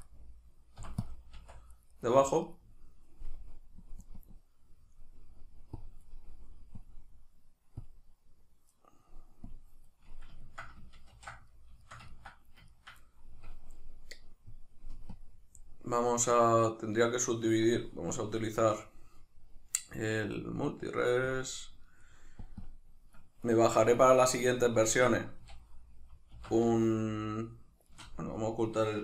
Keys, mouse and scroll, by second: 0.2 right click, 0.8 p, 1.4 Tab, 1.7 right click, 1.9 right click, 2.2 right click, 2.4 right click, 3.8-10.1 drag, 10.1-15.1 middle drag, 11.1 ctrl+2, 15.1-24.1 drag, 23.5 Tab, 24.1-25.4 shift+middle drag, 24.9 Tab, 25.4 a, 26.3 alt+s, 28.0 shift+right click, 28.3 \.